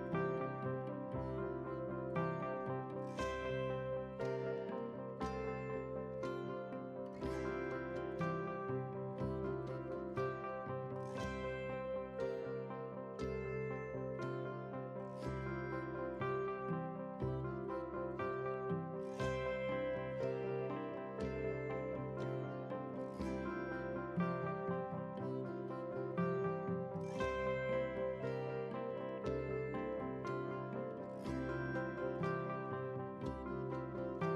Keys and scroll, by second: 30.1 ctrl+j.